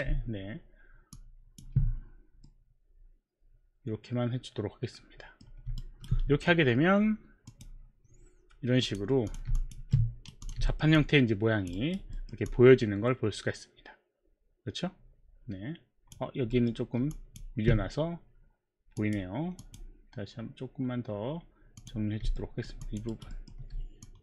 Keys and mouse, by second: 1.2 ctrl+click, 2.5 middle click, 5.8 alt+right click, 7.5 click, 8.8 click, 9.3 click, 9.6 alt+click, 9.9 right click, 10.5 click, 10.5 right click, 10.9 alt+middle click, 10.9 click, 10.9 alt+click, 11.8 alt+right click, 12.1 alt+middle click, 12.4 alt+click, 12.4 alt+middle click, 12.4 alt+right click, 16.5 alt+middle click, 17.2 alt+click, 17.2 alt+middle click, 19.0 click, 19.7 click, 21.7 click, 22.4 alt+middle click, 23.1 alt+right click, 23.1 alt+click, 23.4 alt+middle click.